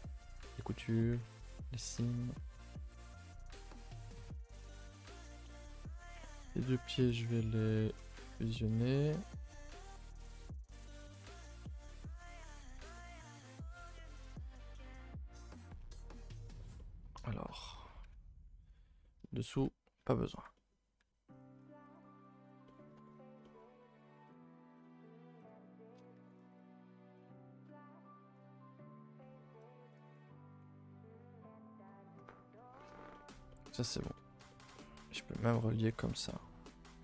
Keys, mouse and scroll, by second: 0.8 a, 0.9 a, 1.8 shift+middle click, 2.0-2.4 scroll down 2, 2.4 Tab, 2.9-3.5 middle drag, 3.5 alt+h, 3.9 a, 4.1 a, 4.2 middle click, 4.4 ctrl+s, 4.8 shift+middle click, 5.3 click, 5.5 middle click, 6.2 shift+click, 7.0 ctrl+i, 8.1 click, 8.8 click, 9.3 shift+click, 10.1 ctrl+j, 12.0 j, 12.6 Tab, 13.0 middle click, 13.2 a, 13.3 a, 13.5 middle click, 13.7-14.0 scroll up 2, 14.0-15.6 shift+middle drag, 15.6 click, 15.8 a, 16.0 a, 16.1 middle click, 17.1-17.6 scroll up 2, 17.6 a, 17.8 a, 18.1-18.7 scroll down 1, 18.7 alt+click, 19.0 middle click, 19.6 alt+shift+click, 20.3 alt+click, 20.6 middle click, 21.4 alt+shift+click, 22.7 middle click, 23.6-24.3 scroll up 2, 24.3 alt+shift+click, 26.2 ctrl+z, 26.6 alt+shift+click, 30.2-32.2 right drag, 32.2-32.6 scroll down 2, 32.6-33.9 shift+middle drag, 33.9 a, 34.1 a, 34.2-35.2 middle drag, 35.2-35.5 scroll up 3, 35.5 middle click, 36.0 alt+click, 36.4 middle click, 36.5-36.9 scroll up 2, 36.9 shift+middle click.